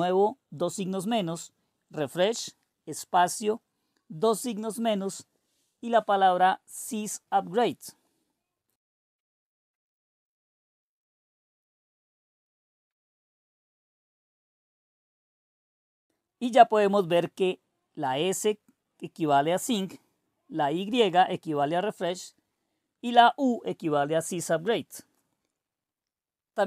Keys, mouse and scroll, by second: 0.0-9.7 typing, 13.0 Return, 18.5 click, 19.6 click, 21.4-23.3 drag, 24.2-26.1 drag.